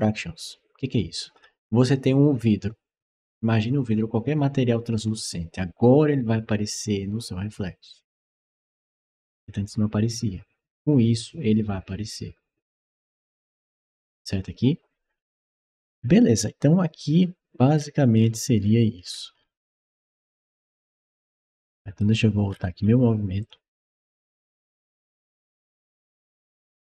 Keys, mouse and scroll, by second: 15.7-20.2 scroll down 15, 20.5 right click, 22.3 scroll up 1, 23.2 click, 25.2 click, 26.3 click.